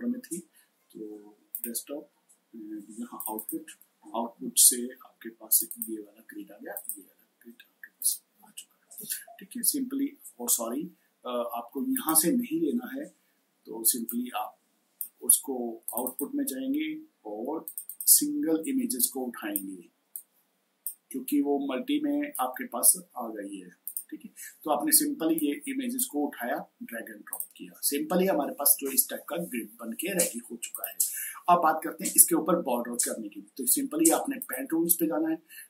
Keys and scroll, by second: 12.7 Delete.